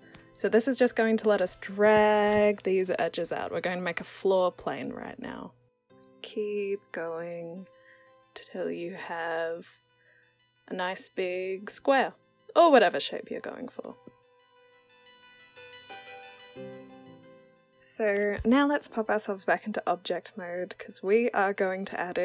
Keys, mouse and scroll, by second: 0.0 click, 1.3 click, 2.4 w, 3.3 click, 5.1-6.2 alt+drag, 6.7 click, 7.9 alt+click, 9.4 click, 10.2 alt+click, 11.5 click, 12.3 alt+click, 13.1 alt+right click, 13.9 click, 14.5 click, 15.0 alt+click, 15.8 click, 16.5 alt+click, 18.0 click, 18.8 click, 19.3 click, 20.2-21.5 alt+drag.